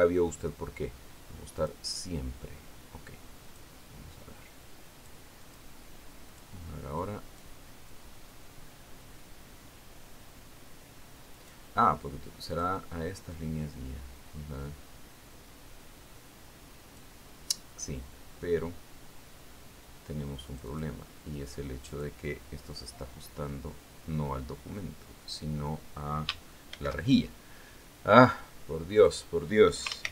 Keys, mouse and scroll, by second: 3.0 click, 4.9 click, 6.0 click, 6.9 click, 7.8 click, 8.5 click, 9.4-13.2 drag, 14.0 click, 14.8-18.7 drag, 22.0 click, 23.4 click, 24.2-27.1 drag, 28.2 ctrl+shift+f.